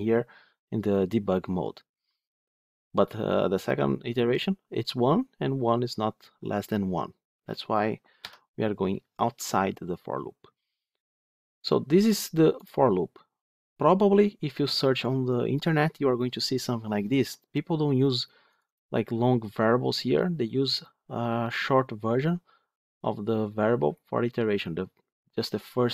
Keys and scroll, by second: 8.1 F9.